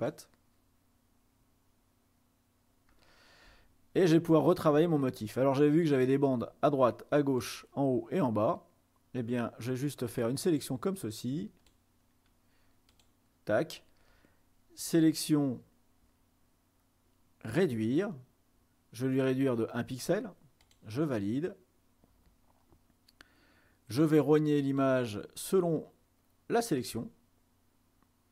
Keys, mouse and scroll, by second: 3.7-5.2 ctrl+scroll up 2, 7.5 click, 10.4-12.1 drag, 13.0 click, 15.1 click, 17.7 click, 18.0 click, 20.8 click, 24.7 click, 26.9 click.